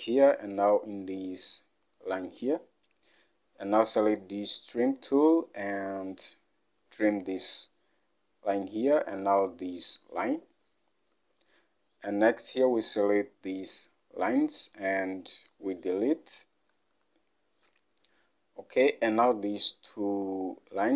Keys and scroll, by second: 11.2 Escape, 17.0 Delete.